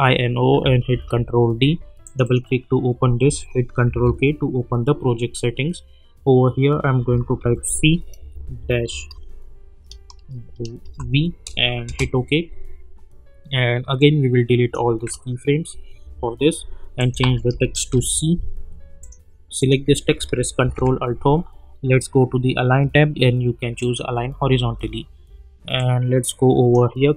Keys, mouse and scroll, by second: 0.9 ctrl+d, 2.0 click, 3.9 ctrl+k, 7.4 shift+c, 8.2 space, 8.4 -, 8.7 space, 10.8 shift+v, 11.8 Return, 14.0-14.9 drag, 17.2 ctrl+a, 17.9 shift+c, 19.0 click, 20.6 ctrl+alt+Home, 23.8-27.0 drag.